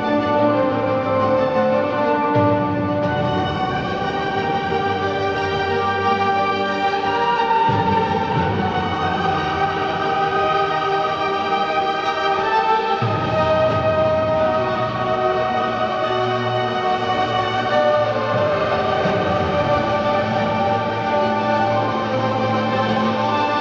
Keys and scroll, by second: 3.4 ctrl+Delete, 3.6 Return, 3.7 ctrl+Delete, 4.4 ctrl+KP_Add, 4.6 space, 6.5 space, 7.2 space, 8.2 ctrl+z, 10.0 space, 14.9 alt+Delete, 15.2 Return, 15.3 alt+Delete, 20.7 ctrl+Delete, 20.9 Return, 21.0 ctrl+Delete, 22.2 space.